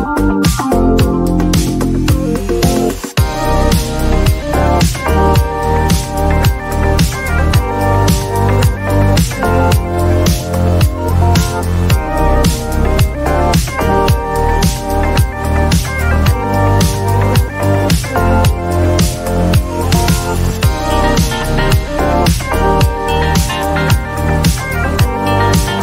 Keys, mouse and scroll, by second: 1.1 click, 3.4 click, 4.6 click, 5.8 typing, 10.4-11.5 typing, 10.4 click, 14.2 click, 14.6-15.5 typing, 17.5 click, 17.8-18.5 typing, 21.0-22.1 typing, 21.3 click, 21.6-23.4 drag, 24.0 click, 24.6-25.4 typing, 24.6 click, 24.9-25.8 drag.